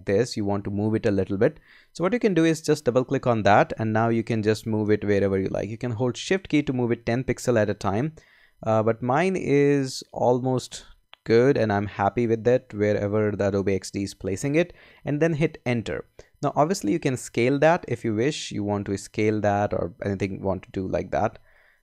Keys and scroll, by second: 4.4 Right, 6.0 shift+Right, 6.6 shift+Right, 7.6 shift+Left, 8.4 shift+Up, 9.0 shift+Down, 11.6 shift+Up, 12.8 shift+Right, 13.5 shift+Left, 21.3 Left.